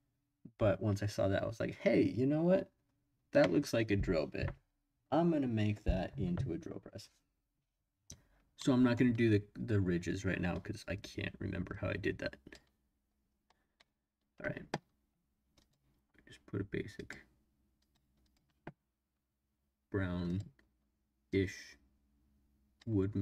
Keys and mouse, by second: 8.6-9.0 middle drag, 11.7 click, 15.6 click, 16.9 click, 17.8 click, 20.2 click.